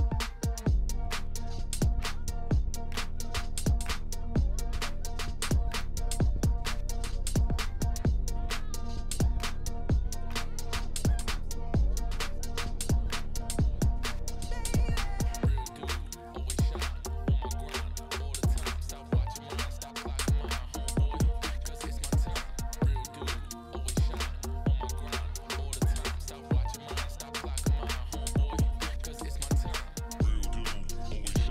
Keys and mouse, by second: 0.0 space, 1.9 space, 3.9 click, 5.8 ctrl+Tab, 6.5 a, 7.2 KP_Decimal, 8.8 click, 11.1 click, 11.6 click, 13.0 click, 13.7 click, 14.7 click, 15.6 drag, 16.0 shift+click, 21.5-21.8 ctrl+middle drag, 23.1 ctrl+middle click, 24.7 ctrl+middle click, 25.3 ctrl+middle click.